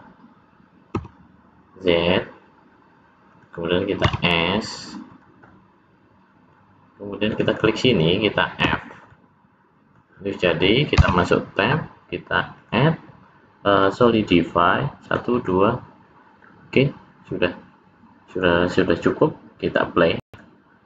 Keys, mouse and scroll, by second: 4.0 s, 5.5 middle click, 7.3 click, 7.5 click, 8.6 f, 9.1 middle click, 10.9 Tab, 12.6 click, 15.0 click, 15.4 click, 16.4 middle click, 19.6 click.